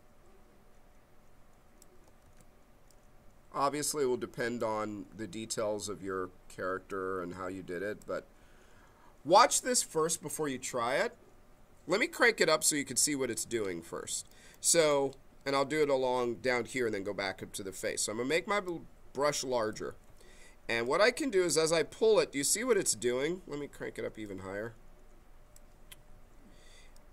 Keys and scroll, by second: 2.2 ctrl+z, 16.5 b, 22.9 ctrl+z.